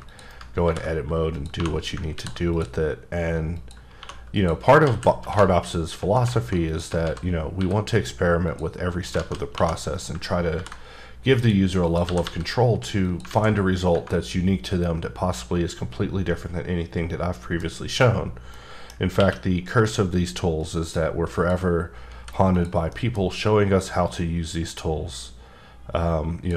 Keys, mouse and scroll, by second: 0.1 click, 0.3 right click, 0.6 ctrl+b, 1.3 click, 1.5 2, 2.1 ctrl+r, 2.5 click, 3.6 click, 4.0 2, 4.3 click, 4.8 alt+z, 5.3 3, 5.6 click, 7.0 alt+z, 7.2 scroll up 2, 7.6 e, 8.4 click, 9.2 alt+z, 9.5 2, 9.9 click, 10.5 ctrl+b, 11.4 click, 11.8 click, 12.0 g, 12.2 g, 13.0 click, 13.3 z, 14.2-14.8 scroll down 2, 14.8 middle click, 17.7-18.5 scroll up 1, 18.5 middle click, 18.9 scroll up 1, 19.2 q, 20.6 click, 21.3 click, 22.1 h, 22.5 click, 22.9 middle click, 23.2 scroll up 1, 24.1-26.5 drag.